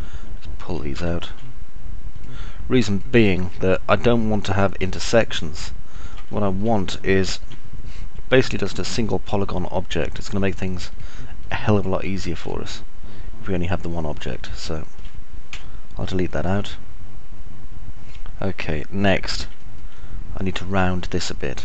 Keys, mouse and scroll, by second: 0.0 alt+click, 0.0 alt+middle click, 0.0 alt+right click, 1.2 alt+click, 1.2 alt+middle click, 1.2 alt+right click, 3.0 ctrl+right click, 4.7 ctrl+right click, 5.2 ctrl+right click, 6.3 alt+click, 6.3 alt+middle click, 6.3 alt+right click, 7.2 alt+click, 7.2 alt+middle click, 7.2 alt+right click, 8.3 ctrl+right click, 11.0 ctrl+right click, 12.7-15.0 alt+drag, 12.7-15.0 alt+middle drag, 12.7-15.0 alt+right drag, 17.0-19.7 alt+drag, 17.0-19.7 alt+middle drag, 17.0-19.7 alt+right drag, 19.8-20.8 alt+drag, 19.8-20.8 alt+middle drag, 19.8-20.8 alt+right drag.